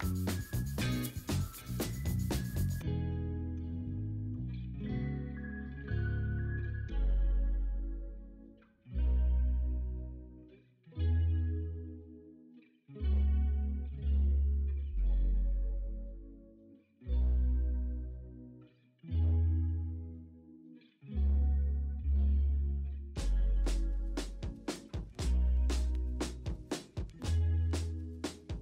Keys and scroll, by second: 0.2 b, 1.1 v, 2.2 v, 4.8 ctrl+alt+g, 5.1 b, 5.6 ctrl+i, 7.8 0, 10.0 3, 12.0 v, 12.4 ctrl+d, 12.6 v, 14.2 v, 15.0 ctrl+u, 16.8 v, 17.4 ctrl+t, 17.7 ctrl+z, 18.8 v, 19.1 ctrl+a, 20.7 ctrl+d, 21.4-22.4 typing, 24.9 x.